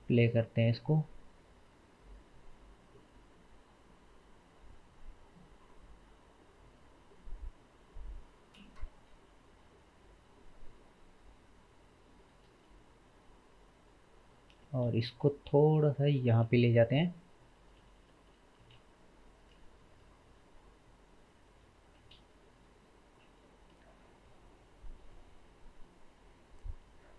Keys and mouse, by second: 14.7-21.1 middle drag, 14.7 g, 18.8 shift+g, 21.1-27.1 drag, 22.0 space.